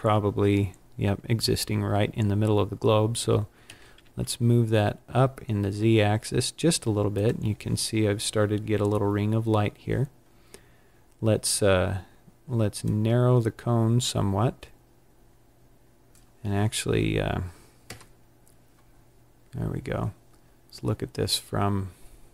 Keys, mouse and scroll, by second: 3.5 g, 7.2 click, 12.7 click, 17.8 KP_0.